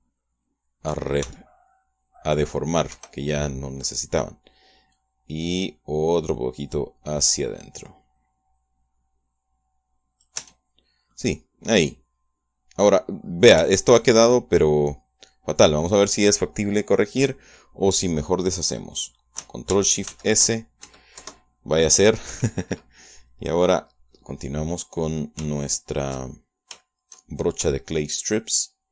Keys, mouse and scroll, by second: 2.2 shift+c, 3.3 middle click, 3.9 Escape, 4.1-4.4 scroll down 1, 4.4 middle click, 5.9-11.4 drag, 11.4 Tab, 11.8 scroll down 1, 12.1-14.1 middle drag, 14.7 shift+middle click, 16.1-16.5 scroll down 1, 21.1 ctrl+shift+s, 21.9 ctrl+shift+KP_Add, 22.2 KP_Enter, 26.7-28.3 shift+middle drag, 28.7 shift+middle click.